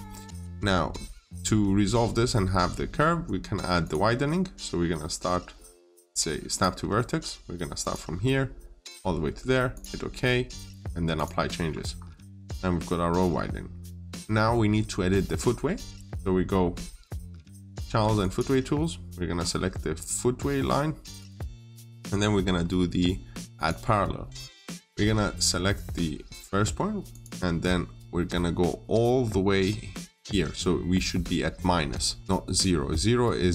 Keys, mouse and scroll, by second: 1.0-1.4 scroll up 1, 3.6 click, 11.4 scroll down 1, 12.9 middle click, 18.0 click, 19.2 scroll up 1, 21.0 click, 28.0 middle click.